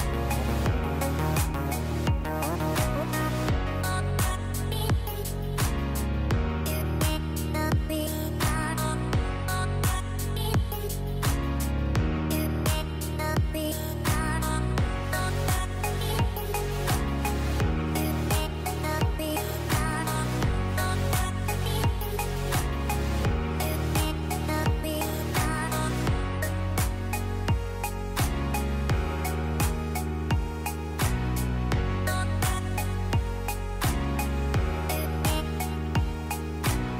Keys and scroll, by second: 0.3 KP_1, 7.2 shift+Page_Down, 10.0 KP_0, 16.1 space, 26.9 space, 29.7 space.